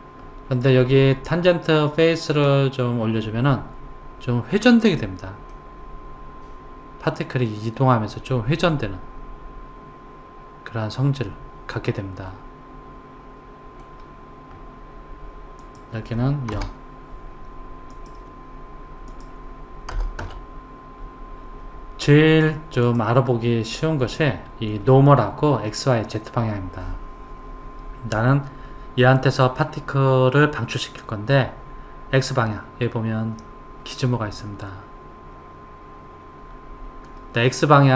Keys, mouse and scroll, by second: 2.5 click, 5.5-8.5 middle drag, 15.6 click, 19.1 click, 22.9 click, 24.2-27.1 middle drag, 33.9-37.0 middle drag.